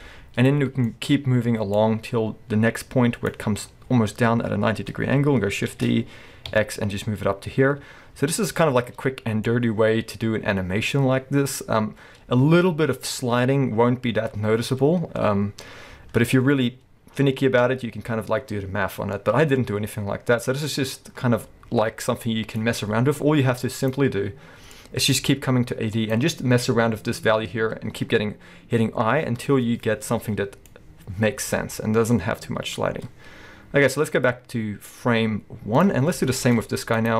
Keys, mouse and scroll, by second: 0.6-0.9 scroll down 2, 0.9 shift+middle click, 1.8-8.5 drag, 4.3-5.7 scroll up 1, 5.7 shift+d, 9.5-23.9 drag, 28.7-36.3 drag, 36.0 scroll down 2, 36.3-37.0 shift+middle drag, 36.6-36.9 scroll up 2, 37.0 drag.